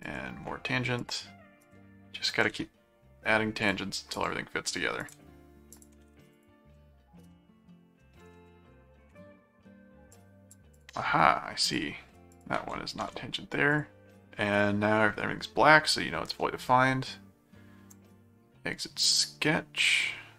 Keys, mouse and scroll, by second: 1.0 click, 1.6 ctrl+click, 2.3 ctrl+alt+click, 2.7 ctrl+alt+a, 3.6 click, 5.0 ctrl+click, 5.7 ctrl+alt+click, 6.0 ctrl+alt+a, 6.3 ctrl+alt+click, 7.3 middle click, 8.5 ctrl+5, 10.1 click, 10.8 click, 11.7 ctrl+click, 12.3 ctrl+click, 13.0 alt+a, 13.7 click, 17.9-20.0 drag.